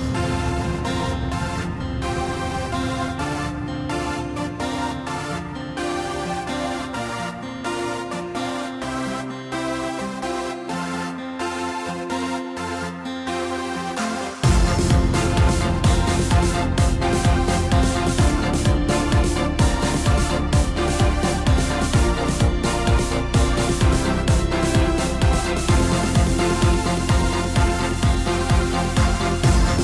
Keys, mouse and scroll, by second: 1.9 click, 3.1 click, 5.7 click, 7.7-9.3 middle drag, 9.3 click, 9.7-10.9 scroll up 1, 10.9-11.9 ctrl+KP_8, 12.7-14.5 scroll up 4, 15.0 shift+click, 15.2 shift+click, 16.7 click, 17.6 click, 18.2-19.8 scroll down 15, 19.9 middle click, 20.6 scroll up 2, 21.6 click, 22.4 scroll up 1, 23.2 click, 24.5 KP_0, 25.8-26.2 scroll down 3, 28.9 click.